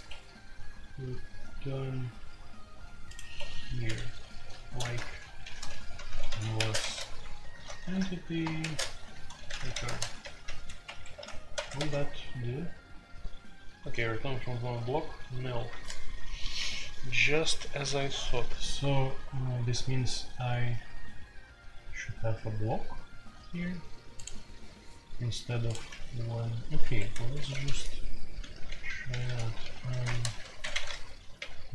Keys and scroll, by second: 0.0 Escape, 3.3 Escape, 4.3-11.5 typing, 4.8 Return, 11.5 Return, 11.5 ctrl+c, 11.9 ctrl+c, 25.9 q, 26.8 Escape, 27.3 typing, 28.5-31.3 typing, 30.0 Return.